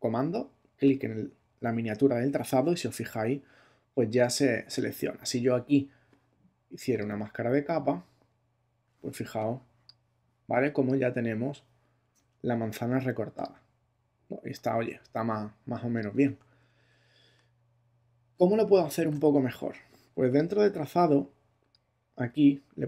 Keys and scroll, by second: 9.2 space, 16.8 alt+super+z, 18.3 alt+super+z.